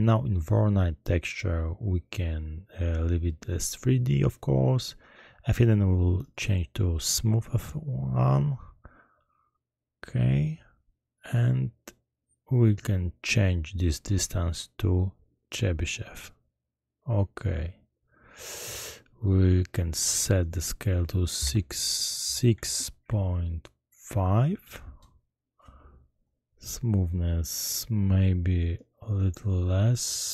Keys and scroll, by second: 21.5-24.0 typing, 24.2 Return.